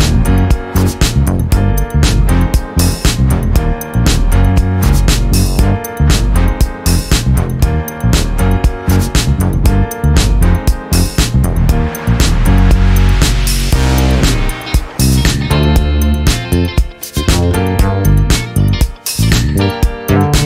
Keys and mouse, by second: 1.8 ctrl+:, 3.1 ctrl+z, 4.2 ctrl+z, 5.9 ctrl+z, 8.5 ctrl+z, 12.4 -, 12.9 click, 12.9 space, 14.8 ctrl+space, 14.9 ctrl+click, 16.1 ctrl+z, 17.5 ctrl+y.